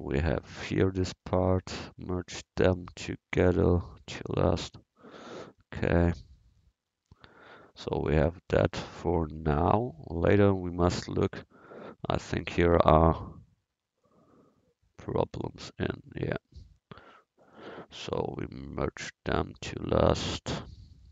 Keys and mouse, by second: 0.3 click, 0.4 middle click, 2.5-4.8 drag, 2.5-4.0 right drag, 5.0-7.1 middle drag, 11.2-12.2 drag, 12.3 click, 12.5 click, 12.7-15.5 drag, 15.9 middle click, 18.8-20.8 drag.